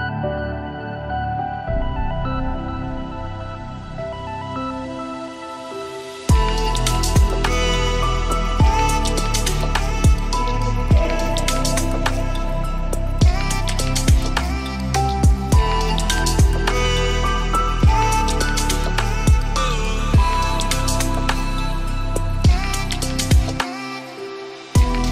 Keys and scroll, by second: 11.0 ctrl+shift+].